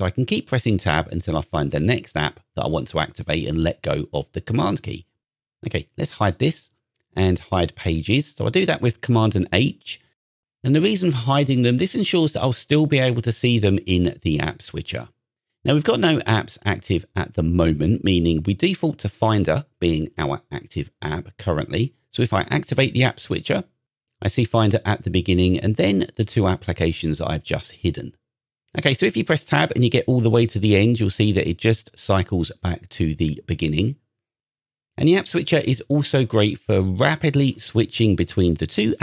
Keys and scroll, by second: 0.3 super+Tab, 6.2 super+h, 9.0 super+h, 22.8 super+Tab, 29.5 super+Tab, 31.9 super+Tab.